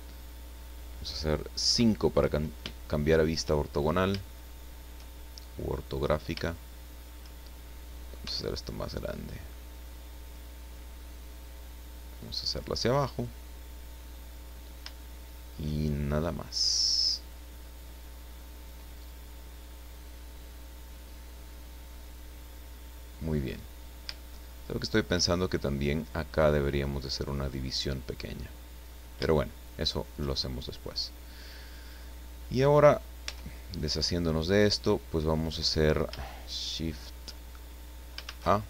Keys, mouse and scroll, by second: 1.6 KP_5, 2.7 shift+middle click, 3.6-4.2 shift+scroll up 4, 4.3 shift+middle click, 5.6 middle click, 6.5 shift+middle click, 8.2 s, 10.2 click, 11.4-13.4 drag, 13.5-14.7 scroll down 3, 14.9-17.5 shift+middle drag, 17.7-18.3 scroll down 1, 18.3-18.8 scroll up 1, 18.9-19.3 scroll up 1, 22.4-23.1 scroll down 2, 23.3-23.9 scroll up 4, 24.1-25.1 shift+middle drag, 29.3 shift+middle click, 30.4 shift+scroll down 2, 31.0-31.5 scroll up 2, 33.3 Tab, 34.5 right click, 35.3-35.6 scroll down 1, 38.2 shift+a.